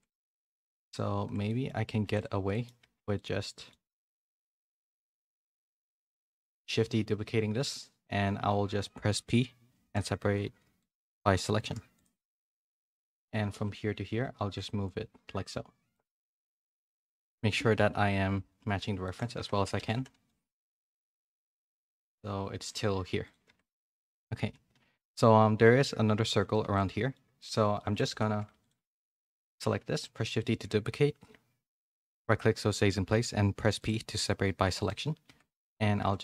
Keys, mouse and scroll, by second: 1.4 middle click, 2.0 Tab, 2.5 middle click, 3.1 middle click, 4.6 middle click, 5.6 g, 6.5 shift+d, 12.2 Tab, 13.0 middle click, 13.2 a, 13.5 e, 16.0 Tab, 16.2 a, 16.4 a, 16.5 middle click, 17.1 click, 17.8-20.7 typing, 19.0 shift+middle click, 19.3 Tab, 23.4 Tab, 23.7 a, 23.9 a, 24.6 a, 26.6 z, 26.8 middle click, 27.3 click, 27.7 shift+middle click, 28.1 Tab, 28.3 2, 28.6 alt+click, 29.1 shift+middle click, 29.8 shift+d, 31.9 p, 34.0 Tab, 34.8 click, 35.5 a, 36.0 f.